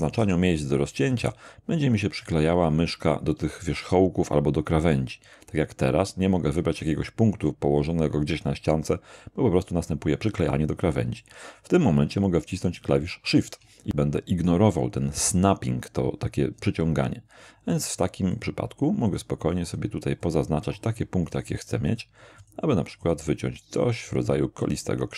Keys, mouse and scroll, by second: 0.2 shift+k, 1.1 shift+click, 17.7 shift+click, 18.3 shift+click, 19.1 shift+click, 19.7 shift+click, 20.2 shift+click, 20.8 shift+click, 21.3 shift+click, 21.9 shift+click, 22.4 shift+click, 23.0 shift+click, 24.2 shift+click.